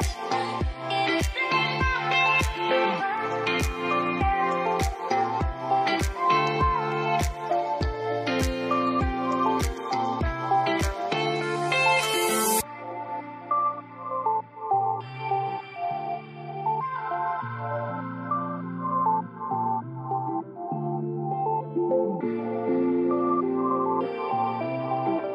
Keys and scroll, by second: 22.5 ctrl+s, 23.6 ctrl+d.